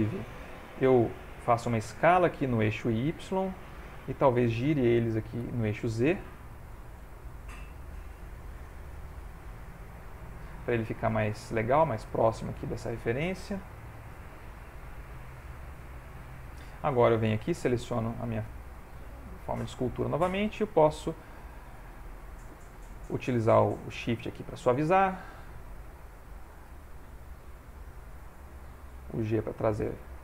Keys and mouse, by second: 0.0 ctrl+z, 2.0 s, 3.7 middle click, 5.4 r, 8.0 g, 10.5 middle click, 10.8 middle click, 13.2 r, 15.7 middle click, 17.4 click, 18.6 ctrl+middle click, 20.3 shift+click, 20.7 shift+click, 21.3 f, 22.1 click, 22.6 click, 22.8 shift+click, 23.7 click, 25.1 click, 25.9 shift+click, 26.1 shift+click, 26.9 f, 28.4 click, 28.9 click, 29.2 click, 29.6-30.2 click, 29.9 click.